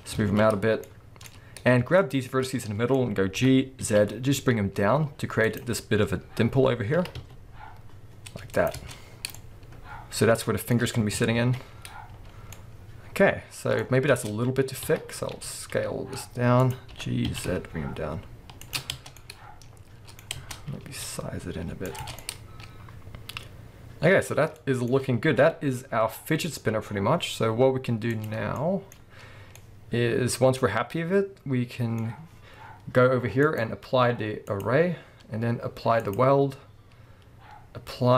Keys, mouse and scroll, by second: 0.2 alt+a, 0.8-2.0 middle drag, 2.0 alt+shift+click, 2.4 scroll down 1, 2.6-5.6 middle drag, 2.9-3.4 scroll up 2, 3.4 g, 5.6 click, 7.4 e, 8.7 click, 8.8 Tab, 9.1 scroll down 2, 9.3-10.1 middle drag, 11.1 KP_1, 11.4 alt+a, 11.7-12.3 scroll up 1, 12.3 scroll down 1, 12.5 middle click, 13.8-14.1 scroll up 1, 14.1 Tab, 14.8 a, 15.2 s, 16.7-18.6 drag, 16.9 g, 18.9 scroll down 1, 19.0 Tab, 19.1-21.9 middle drag, 20.4 Tab, 20.8 s, 21.9 click, 22.0 Tab, 22.2-28.1 middle drag, 24.2-24.6 scroll down 1, 25.4 KP_7, 26.6 scroll down 2, 26.9-27.7 scroll up 2, 27.7-28.1 scroll up 1, 28.1 click, 28.5-33.4 shift+middle drag, 32.1-33.1 scroll up 2, 33.1-33.4 scroll up 1, 33.4 click, 34.5-38.1 drag.